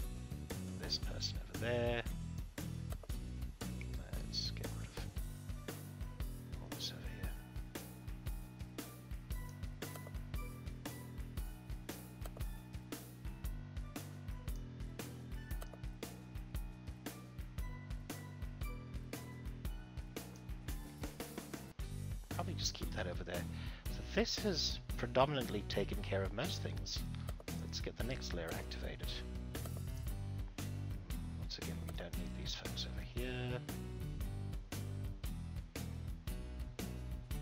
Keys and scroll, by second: 20.8 ctrl+z.